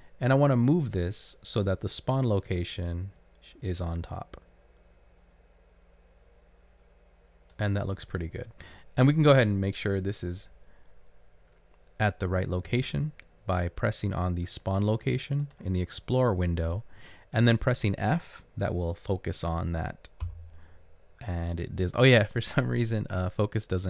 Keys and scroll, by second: 20.4 f.